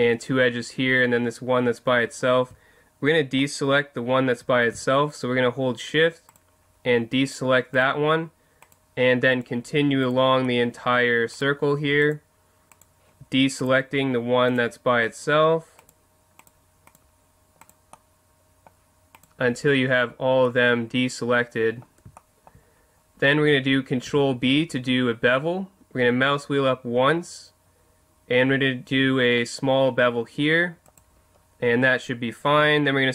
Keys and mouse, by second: 6.3-10.4 right drag, 17.9-20.5 middle drag, 20.9 middle click, 24.1 ctrl+b, 31.0-32.7 drag, 32.7 middle click.